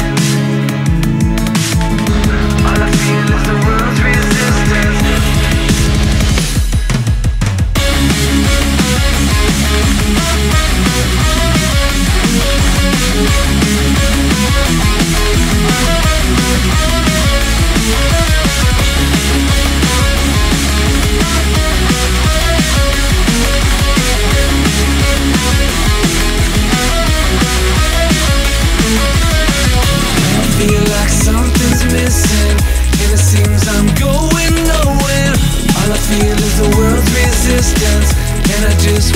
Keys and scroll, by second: 0.0 ctrl+z, 10.9-12.2 scroll down 1, 12.2 ctrl+z, 18.4 scroll up 1, 19.1 scroll down 1, 19.3 scroll up 1, 19.6 scroll down 1, 19.6 ctrl+z, 19.8 ctrl+z, 20.6 scroll down 1, 20.6 ctrl+z, 21.2 scroll down 1, 21.4 scroll up 1, 21.8 ctrl+z, 22.7 ctrl+z, 23.2 ctrl+z, 25.3 scroll up 1, 26.1 ctrl+z, 28.6 scroll down 1, 28.7 ctrl+z, 29.6 ctrl+z, 31.0 ctrl+z, 32.3 ctrl+z, 33.8 ctrl+z, 35.2 ctrl+z.